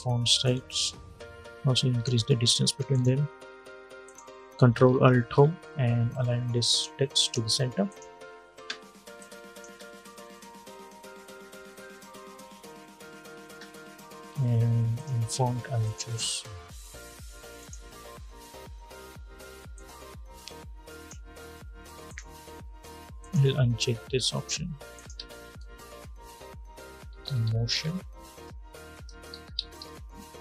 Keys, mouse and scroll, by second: 4.9 ctrl+alt+Home, 6.4 click, 9.4 space, 13.3 space, 14.7 click, 16.2-17.3 scroll up 1, 17.3-21.8 drag, 24.9 ctrl+a, 25.5-30.4 typing, 28.0 Return.